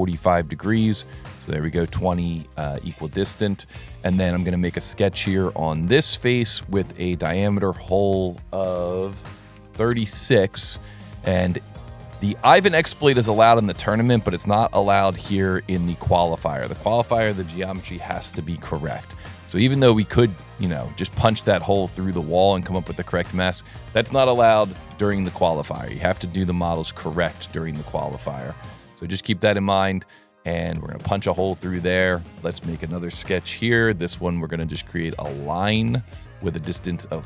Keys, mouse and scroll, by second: 1.5 click, 3.0 click, 4.0 click, 5.2 click, 6.7 click, 8.2 right click, 10.9 middle click, 11.8 s, 13.2 click, 14.8 click, 15.9 click, 16.6 click, 19.4 middle click, 21.1 click, 22.5 click, 23.6 click, 25.6 scroll up 1, 26.0 middle click, 27.2 scroll up 1, 27.4 s, 28.3 click, 30.5 click, 30.8-31.3 scroll down 3, 31.6 click, 32.0 s, 32.5 click, 33.8 s, 34.7 click, 35.4 click, 36.3 click.